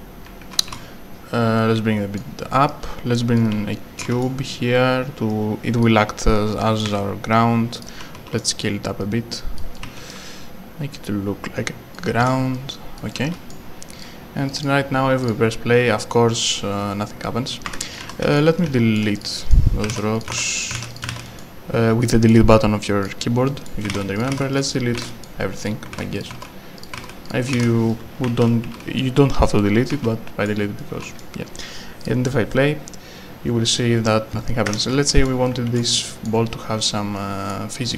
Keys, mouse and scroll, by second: 0.8 a, 1.6 click, 3.4 right click, 5.3 click, 6.8 r, 7.3 click, 8.4 s, 9.0 click, 9.7 right click, 9.8 w, 10.1 d, 10.9 click, 12.2 w, 13.0 click, 13.0 w, 14.0 click, 17.7 Escape, 17.8-19.6 typing, 18.6 right click, 19.2 click, 19.3 right click, 20.1 Delete, 20.3 click, 20.6 click, 21.0 Delete, 21.1 click, 21.4 right click, 23.1 click, 23.5 right click, 23.9 Delete, 24.2 click, 24.3 click, 24.6 Delete, 25.0 Delete, 25.1 right click, 25.7 click, 25.9 Delete, 26.2 click, 26.4 Delete, 26.9 click, 27.0 Delete, 27.3 click, 27.9 right click, 28.0-31.2 typing, 34.7 Escape, 34.8-36.3 typing, 35.0 right click, 35.7 right click, 36.1 right click, 37.5 s.